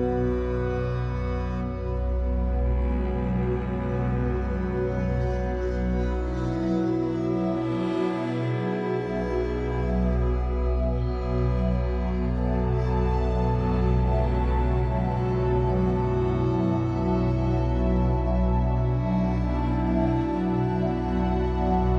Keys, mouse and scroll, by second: 1.7 scroll down 2, 1.9-4.2 shift+middle drag, 3.0 scroll up 2, 4.2-6.0 shift+drag, 6.0-9.9 shift+middle drag, 7.2-7.8 scroll up 2, 9.9-14.6 drag, 14.6 middle click, 15.6-20.9 drag, 20.5-20.9 scroll down 2, 20.9-21.9 middle drag, 21.5-21.9 scroll up 4.